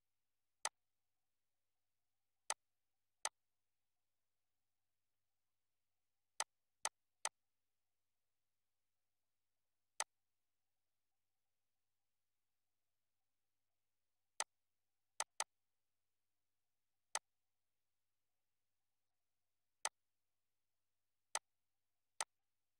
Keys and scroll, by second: 5.0 ctrl+z.